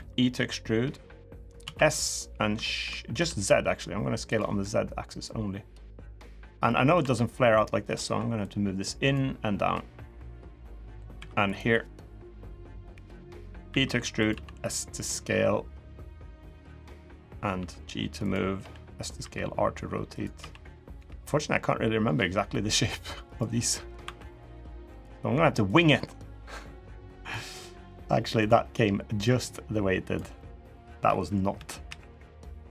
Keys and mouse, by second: 1.4 s, 5.0-6.1 drag, 6.4 middle click, 6.7 2, 7.3 click, 8.2 click, 9.5-10.7 drag, 10.9 3, 11.9 KP_1, 13.4 e, 14.1 s, 17.3 g, 18.3 s, 19.0 r, 20.1 s, 20.7 g, 23.4 middle click, 23.8 2, 24.3 click, 24.7 click, 25.5-27.1 drag, 27.7 click, 29.0 click, 30.1 middle click, 31.3 KP_3, 31.6 KP_1.